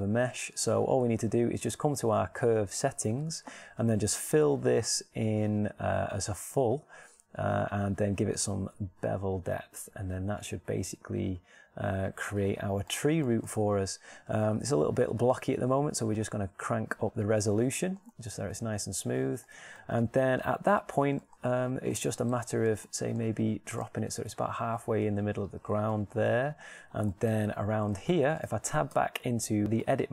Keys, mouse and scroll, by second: 13.8-18.4 shift+middle drag, 18.9 middle click, 25.0 g, 27.9-28.9 middle drag, 29.7 Tab.